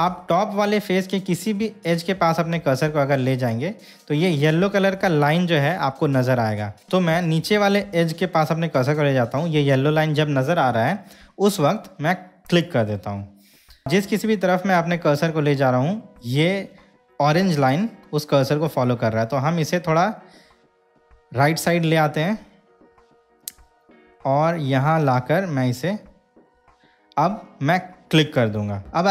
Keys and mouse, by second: 28.4 click.